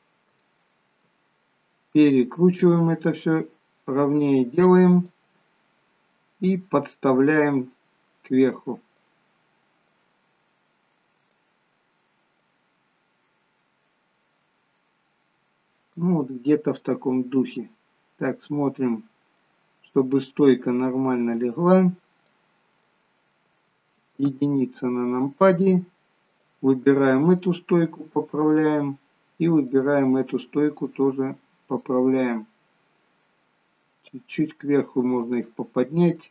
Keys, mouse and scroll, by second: 0.3 shift+middle click, 2.0 click, 7.4 click, 9.8 click, 16.7-18.2 scroll up 2, 18.2 middle click, 20.6 click, 22.8 middle click, 24.3 KP_1, 26.2 click, 27.4 click, 34.1 click, 36.1 click.